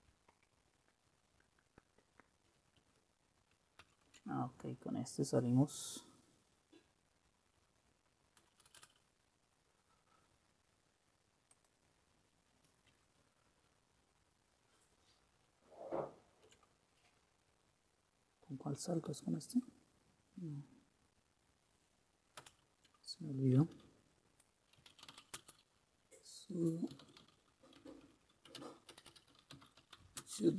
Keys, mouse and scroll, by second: 3.9 super+w, 8.5 Return, 8.7 Return, 8.9 Return, 19.2 super+q, 22.5 super+Return, 24.7-30.5 typing.